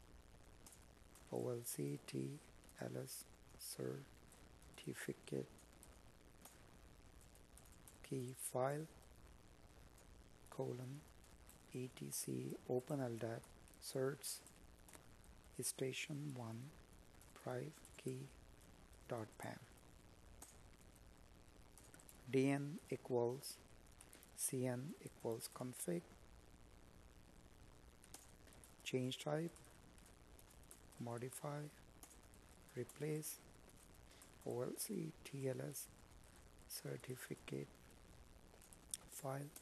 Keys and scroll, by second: 2.5 space, 15.4 space, 19.6 Tab, 21.9 space, 23.5 Tab, 25.3 space, 31.0 Tab, 37.7 space.